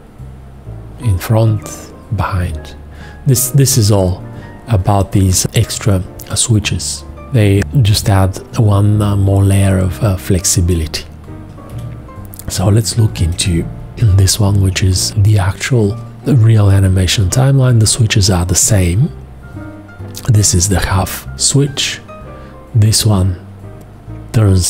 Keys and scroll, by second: 11.7 F2, 13.4 space, 18.6 F1.